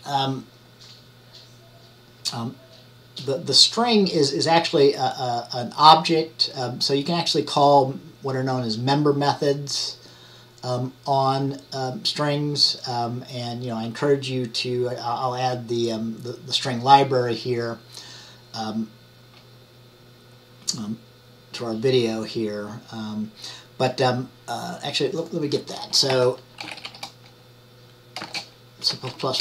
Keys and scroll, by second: 26.2-26.9 typing, 29.2 Right.